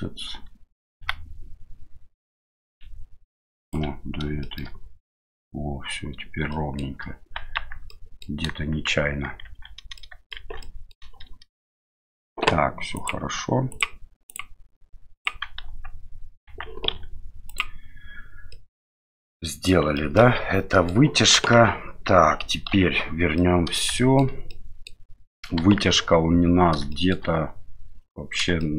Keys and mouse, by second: 1.0 g, 4.5 shift+middle click, 6.6 shift+middle click, 7.6 Tab, 7.9-8.2 middle drag, 8.9 shift+z, 9.5 shift+z, 10.0 shift+middle click, 10.4 shift+z, 10.6 middle drag, 11.8 middle click, 13.0 click, 13.7 click, 14.3 click, 15.2 click, 15.7 Tab, 16.5 Tab, 16.9 q, 18.5-19.7 middle drag, 20.0 shift+middle drag, 20.7 middle click, 21.3 KP_1, 22.7 KP_Divide, 23.4-23.8 middle drag, 24.0 shift+middle drag, 24.5 middle click, 25.6 KP_1, 26.9 shift+middle drag, 28.6 shift+middle drag.